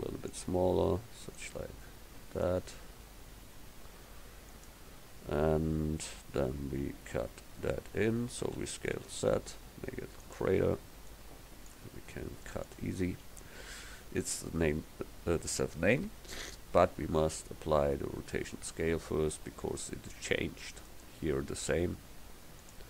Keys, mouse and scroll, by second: 1.4-4.6 drag, 3.1 s, 8.6 s, 11.1 click, 20.9-22.3 drag.